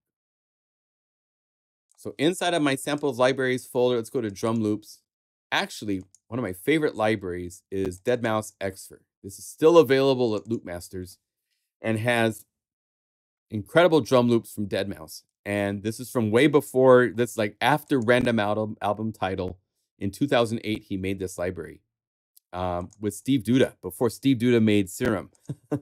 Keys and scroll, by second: 15.8 typing.